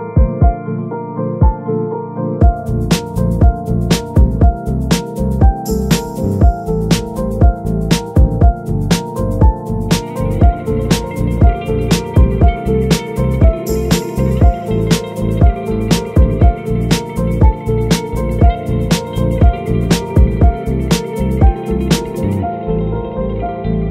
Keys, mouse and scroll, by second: 0.1-4.5 drag, 6.8-19.3 drag, 19.3 middle click, 19.9-21.7 drag, 23.4-23.9 drag.